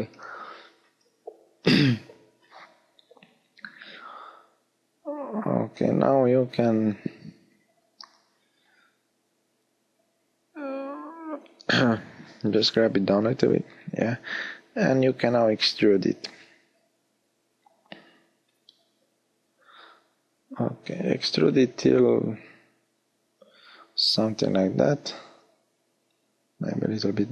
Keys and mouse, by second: 10.4-11.7 drag, 15.0 e, 23.7 g.